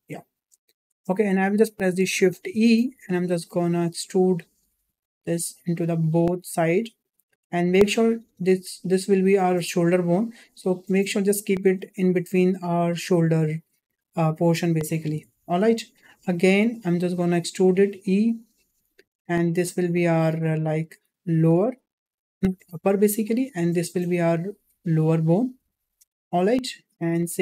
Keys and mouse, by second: 1.0 shift+middle click, 2.3 shift+e, 15.3 shift+middle click, 17.8 e, 23.4 e, 27.2 shift+middle click.